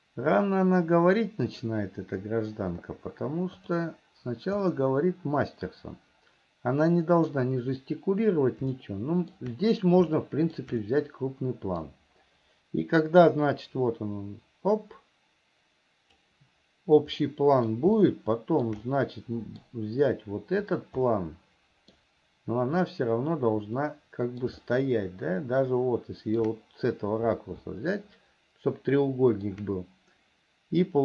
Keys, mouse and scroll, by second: 3.9 click, 4.9-7.7 middle drag, 9.1 shift+middle click, 10.4 shift+middle click, 11.1-12.2 middle drag, 13.6-16.8 drag, 17.5 middle click, 18.3 shift+middle click, 19.2 middle click, 21.4 middle click, 24.1 middle click, 25.0-26.8 shift+middle drag, 28.1-29.9 shift+middle drag.